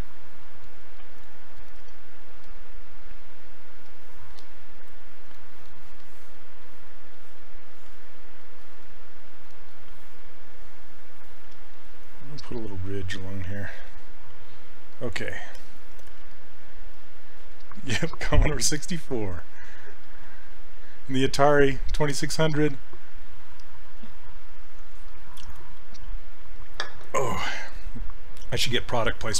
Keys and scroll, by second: 1.9 s.